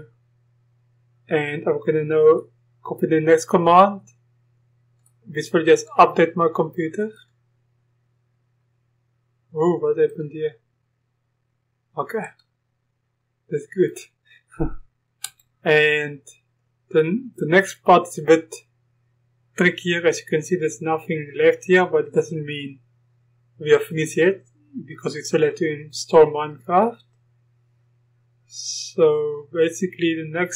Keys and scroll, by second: 16.7 Return.